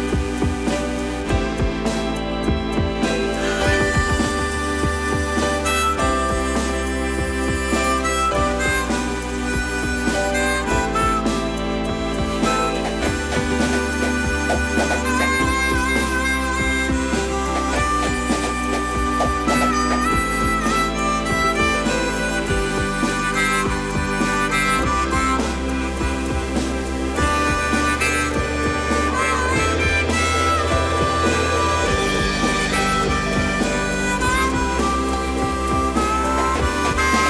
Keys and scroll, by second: 5.1 space, 5.1 Escape, 7.0 shift+space, 7.1 Escape, 14.9 space, 14.9 Escape, 26.0 Delete, 26.9 Delete, 33.1 ctrl+c, 33.4 Escape, 35.6 ctrl+v.